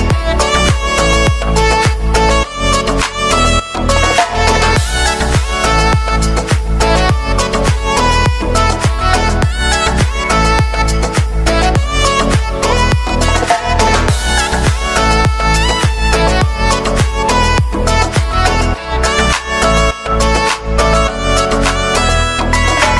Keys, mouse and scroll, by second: 0.4 shift+click, 0.8 shift+click, 1.8 shift+click, 2.6 shift+click, 3.3-4.9 shift+middle drag, 4.9 shift+click, 5.5 scroll down 6, 5.8-7.3 shift+middle drag, 7.3 g, 9.9 KP_1, 10.3 KP_3, 11.8 r, 14.2 g, 15.7 r, 17.3 scroll down 3, 17.5-18.8 middle drag, 18.8 r, 20.1 scroll down 3, 20.3-21.3 middle drag, 21.3-21.9 scroll up 4, 21.9-22.9 shift+middle drag.